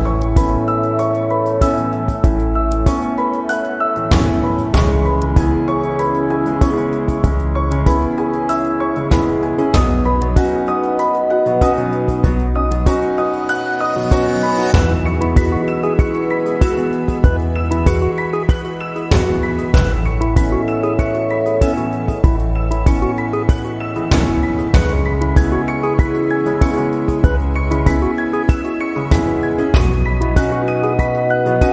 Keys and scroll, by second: 2.9 ctrl+j.